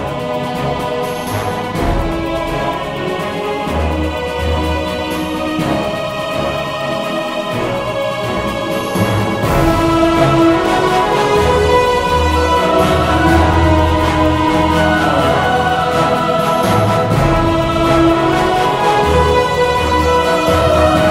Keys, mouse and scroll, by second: 0.3-1.6 drag, 1.6 KP_1, 4.7 Tab, 6.3 ctrl+r, 8.7 Tab, 11.2 z, 12.0-14.2 super+middle drag, 14.2 KP_3, 14.8 KP_1, 16.4 KP_0, 18.7 shift+f.